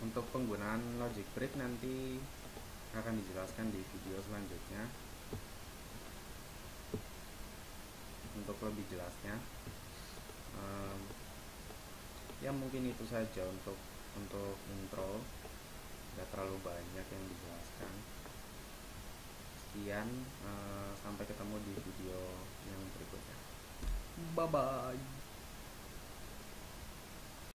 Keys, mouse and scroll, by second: 5.5-7.5 middle drag, 7.5 middle click, 10.3-14.6 middle drag.